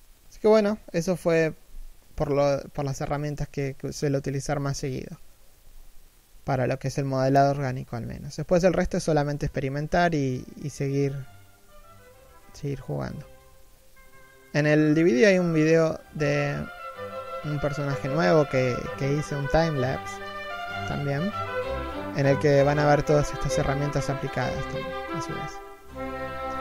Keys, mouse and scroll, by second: 9.5 middle click, 9.6 scroll up 1, 9.8-13.8 typing, 9.9 middle click, 10.6 scroll down 1, 11.3 Tab, 11.6 middle click, 12.6 middle click, 12.9-13.6 scroll down 2, 13.6 scroll up 1, 13.7 middle click, 14.3-14.7 scroll down 1, 14.7 shift+middle click, 14.9-16.6 typing, 15.4 right click, 15.6 shift+middle click, 16.5 right click, 16.8 scroll down 1, 16.9 scroll up 1, 17.2 right click, 17.6 scroll down 1, 17.8 1, 17.9 shift+middle click, 18.1 3, 18.3 middle click, 18.8 middle click, 19.0 scroll down 1, 19.2 middle click, 19.9-22.2 typing, 20.1-20.6 scroll up 1, 20.6 middle click, 21.1 scroll down 1, 21.3 scroll up 1, 21.5 right click, 21.6 middle click, 22.1 scroll down 1, 22.4-22.9 scroll up 2, 22.6 right click, 22.9 right click, 23.3 alt+right click, 23.4 middle click, 23.6 1, 24.6 scroll down 1, 24.9 middle click, 25.0 scroll up 1, 25.1-26.4 typing, 25.4 alt+right click, 25.8 middle click, 26.1 shift+middle click, 26.3 right click.